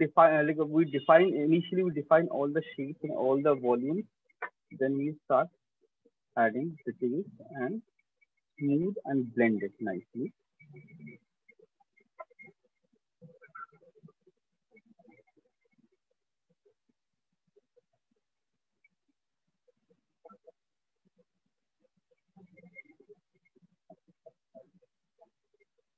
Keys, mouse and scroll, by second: 2.9-3.8 ], 4.7 click, 5.7 click, 6.0 click, 6.4 click, 7.0 click, 9.1 shift+click, 9.9 click, 11.7 alt+click, 12.2 ], 12.6 ], 12.8 ], 13.6 ], 14.0 click, 14.5 click, 16.7 click, 18.0 click, 19.2 click, 22.0 shift+click, 24.4 click.